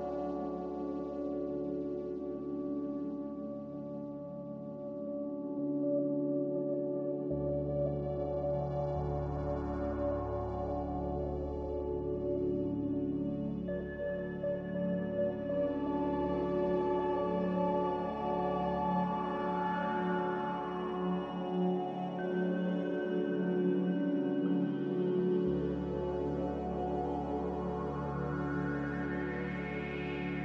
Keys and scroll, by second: 0.2 x, 1.2 4, 2.0 BackSpace, 2.2 5, 6.1 typing, 10.3-10.7 typing, 13.1-13.9 typing, 15.6 Return, 16.6 z, 17.5 Delete, 18.4 Delete, 22.8 Delete, 28.3 typing.